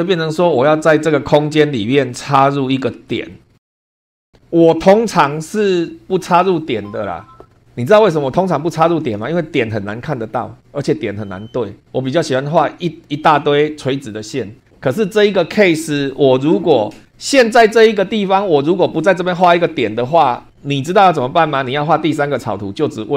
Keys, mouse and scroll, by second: 0.0 super+2, 0.5-0.9 scroll down 2, 1.6 shift+click, 2.3 shift+click, 3.3 shift+middle click, 3.6 scroll up 1, 12.9 scroll down 1, 22.1 click.